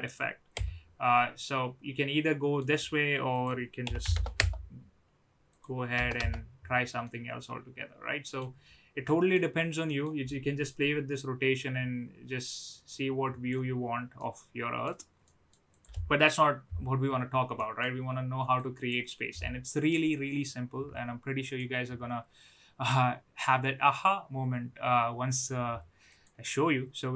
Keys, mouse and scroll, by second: 0.5 KP_3, 1.6-2.6 middle drag, 3.4-4.7 drag, 5.6-6.6 drag, 7.1-8.4 middle drag, 9.0-9.4 middle drag, 10.0 middle click, 10.9-13.5 drag, 14.2-14.8 middle drag, 15.4 middle click, 15.6 click, 17.5 middle click, 18.6 click, 21.4-26.3 drag.